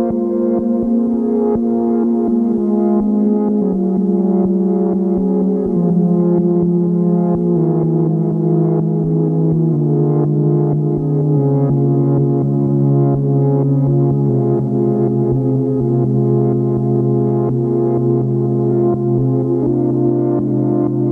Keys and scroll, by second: 8.4 ctrl+z.